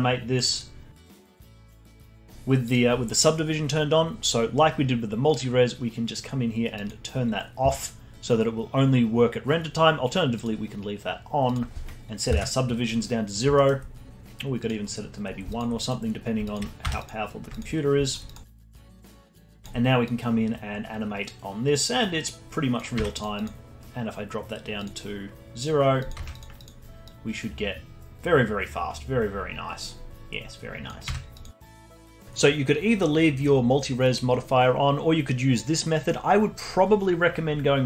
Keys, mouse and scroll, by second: 1.6 alt+click, 1.9 Tab, 2.6 click, 6.8 click, 11.4-13.5 drag, 13.5-14.6 alt+middle drag, 14.6 click, 15.2 scroll up 3, 15.5 alt+click, 16.1 scroll down 3, 16.4 alt+click, 16.8 Tab, 17.5-18.4 alt+drag, 18.5 alt+middle click, 18.7 alt+click, 19.5 alt+click, 23.0 Tab, 23.3 click, 24.8-26.1 drag, 26.1 Tab, 26.6 click, 27.0 click, 31.0 Tab, 31.7 alt+click.